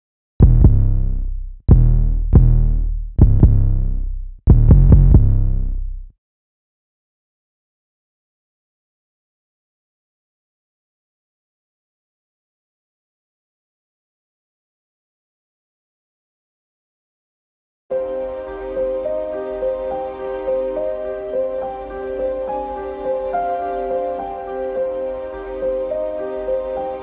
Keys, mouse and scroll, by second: 6.6 F1, 7.7 click, 7.8 F1, 10.2 click, 11.7 F1, 12.2 F1, 12.4 F1.